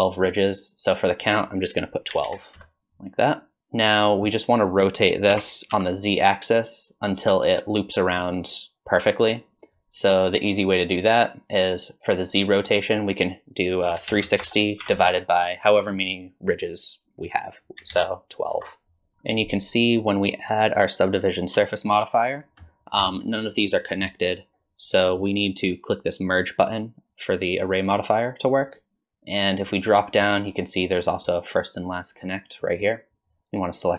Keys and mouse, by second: 1.3-3.0 drag, 3.6 middle click, 5.3 r, 12.8-19.1 drag, 22.0 ctrl+4, 27.9 click, 28.7 click, 33.3 right click.